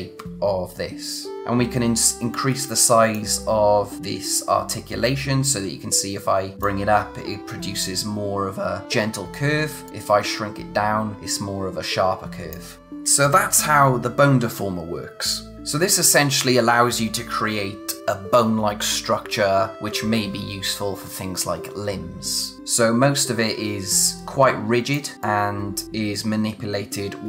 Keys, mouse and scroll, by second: 1.4 click, 2.3 click, 9.8 click, 15.5 click, 24.0 click.